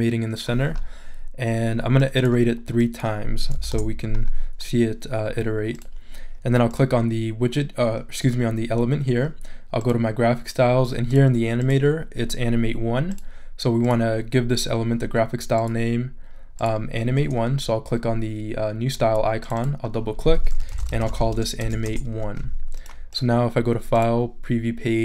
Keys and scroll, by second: 3.6 3, 3.7 Return, 20.4-22.2 typing.